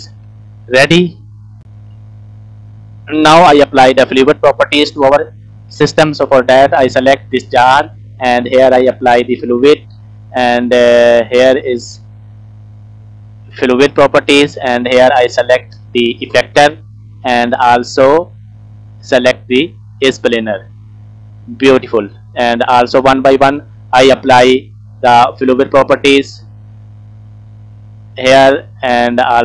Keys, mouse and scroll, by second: 0.1 space, 1.2 click, 8.6 click, 11.2 click, 13.0 click, 13.5 click, 14.5-15.8 drag, 19.3 click, 20.6 click, 22.5 click, 26.2 click, 28.1 click, 28.8-29.4 drag.